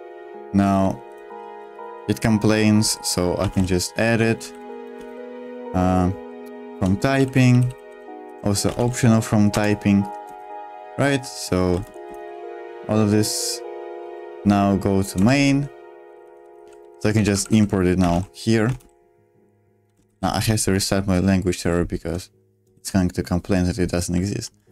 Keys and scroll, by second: 0.8-1.8 typing, 3.2-5.5 typing, 6.8 Return, 6.9-12.6 typing, 9.5 Return, 14.0 k, 15.1 Return, 15.8-20.5 typing, 22.7 space, 22.7 w, 24.2-24.7 typing.